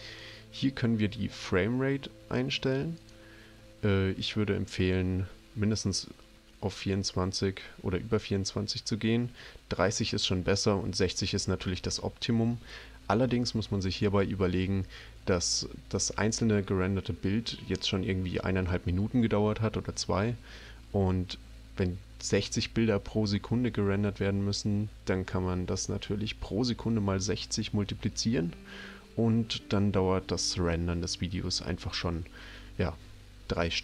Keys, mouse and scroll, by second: 3.0 click.